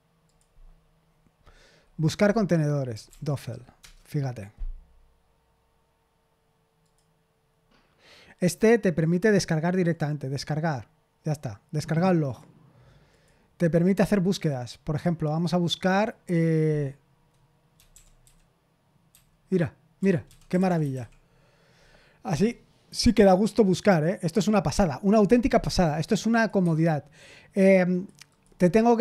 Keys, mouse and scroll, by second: 0.2 click, 0.4 click, 2.6-3.8 typing, 6.8 click, 9.8 click, 12.2 click, 13.1 click, 13.8 click, 15.8 click, 17.5-21.4 typing, 26.4 click, 26.6 Escape, 27.9 click, 28.2 click.